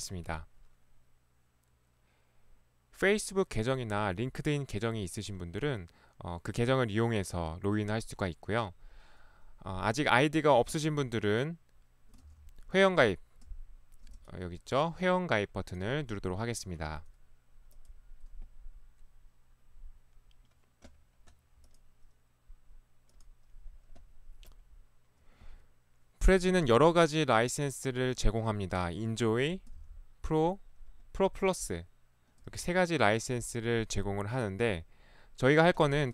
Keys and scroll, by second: 12.3 ctrl+1, 16.9 ctrl+Escape, 17.0 ctrl+1, 32.6 ctrl+1.